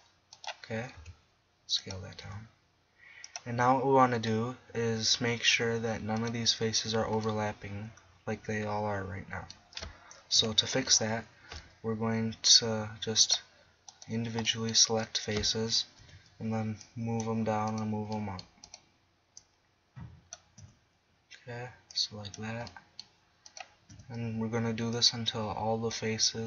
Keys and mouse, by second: 1.0 s, 2.2 g, 9.0-10.4 middle drag, 10.4 KP_1, 10.9 middle click, 12.5-13.9 drag, 16.0 KP_1, 18.3-20.1 middle drag, 20.6 KP_1, 21.3-21.9 middle drag, 23.5 middle click, 23.9 KP_1.